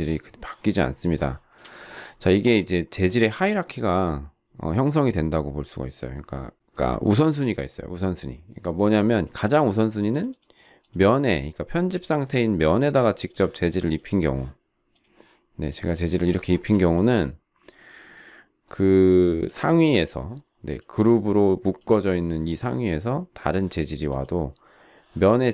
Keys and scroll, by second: 16.5 shift+space.